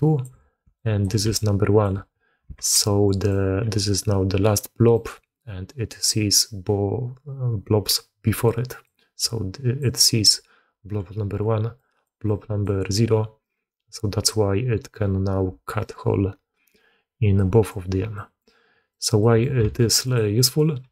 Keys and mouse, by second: 0.5 d, 0.6 click, 0.9 d, 1.2 click, 1.7 d, 1.8 d, 2.4 alt+a, 3.1 click, 3.5 g, 8.1-15.6 typing, 8.3 click, 9.1 click, 11.6 click, 12.1 click, 15.7-17.3 drag, 17.3 d, 18.0-18.3 drag, 18.8-19.3 drag, 19.5 g, 20.2 drag, 20.7 g.